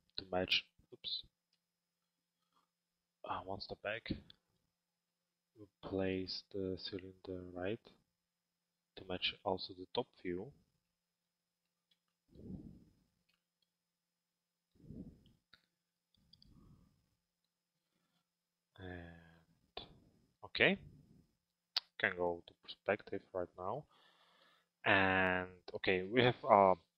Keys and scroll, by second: 22.3 p.